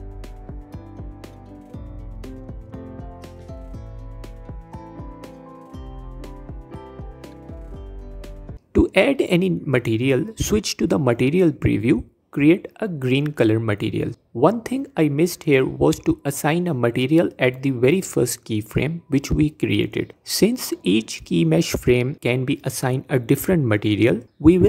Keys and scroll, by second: 0.7 g, 2.0 f, 2.2 f, 4.5 Tab, 9.7 z.